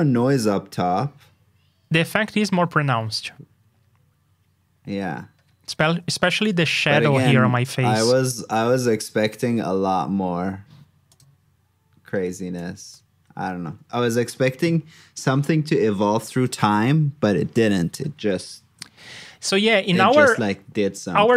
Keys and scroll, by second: 12.8 super+j, 18.6 alt+shift+Down.